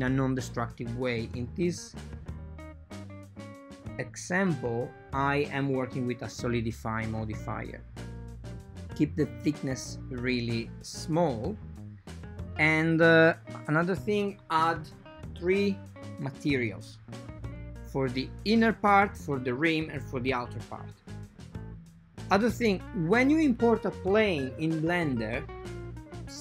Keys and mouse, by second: 1.4 n, 5.0 click, 5.8 click, 6.4 click, 6.6 shift+click, 7.2 click, 7.5 shift+click, 7.8 shift+o, 8.4 right click, 13.2 click, 14.3-16.0 drag, 16.7 click, 21.8 click, 23.6-24.1 drag, 24.4 x, 24.6 shift+a.